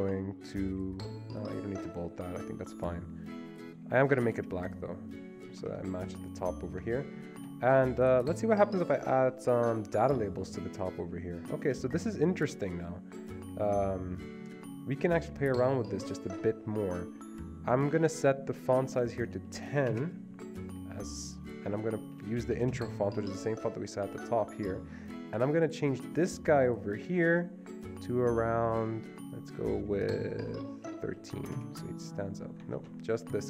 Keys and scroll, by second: 5.6 Escape, 7.1 Escape, 19.5-19.8 typing, 20.0 Return, 22.0-23.2 typing, 30.7-31.7 typing, 31.7 Return, 32.9 ctrl+z.